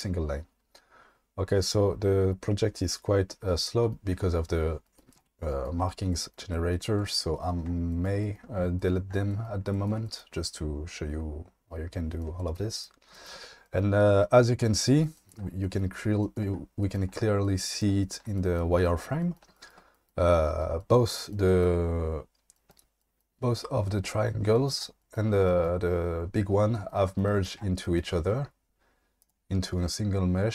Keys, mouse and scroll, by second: 18.3 shift+middle click, 29.2 click.